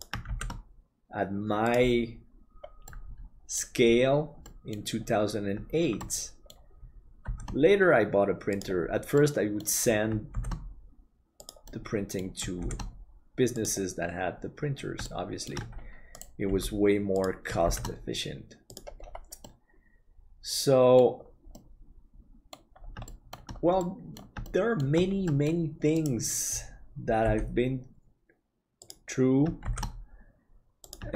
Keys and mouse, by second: 0.4 shift+d, 2.9 middle click, 4.5 middle click, 6.1 middle click, 7.2 shift+d, 9.2 middle click, 10.4 shift+d, 11.7 middle click, 15.1 shift+middle click, 16.4 g, 17.6 shift+d, 19.4-21.2 middle drag, 21.5-22.6 middle drag, 23.0 shift+middle click, 23.9 middle click, 24.5 shift+middle click, 25.3 middle click, 27.2 g, 29.6 shift+d.